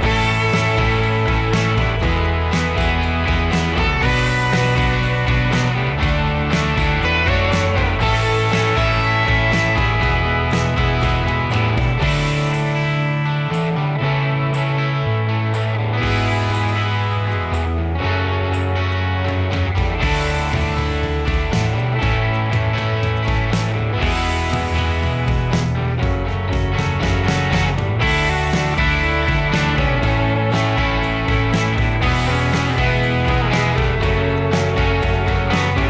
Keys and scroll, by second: 0.8 space, 0.9 Escape, 2.7 Escape, 5.0-6.1 typing, 8.0 Escape, 15.7 r, 17.1-22.9 typing, 23.7 ctrl+g, 24.0-25.6 typing, 26.6 r, 29.2-30.7 typing, 30.9 ctrl+g, 31.6 ctrl+a, 32.7 ctrl+h, 34.2 m.